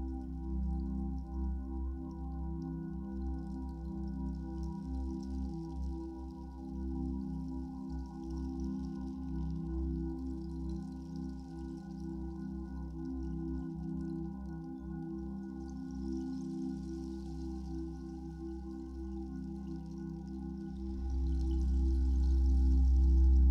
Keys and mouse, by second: 1.5 click, 2.4 alt+shift+click, 2.8-3.8 shift+drag, 3.8 shift+click, 4.3 shift+click, 6.3 alt+click, 7.0 typing, 10.8 Escape, 11.7-13.8 ctrl+alt+drag, 15.6 ctrl+alt+click, 16.0 ctrl+alt+click, 17.4 ctrl+s, 18.4-23.5 drag.